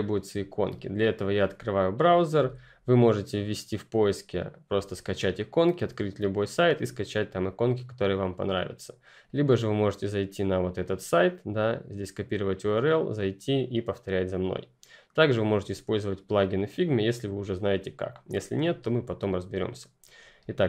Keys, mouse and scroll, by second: 1.1 click, 2.2 F11, 16.8 click.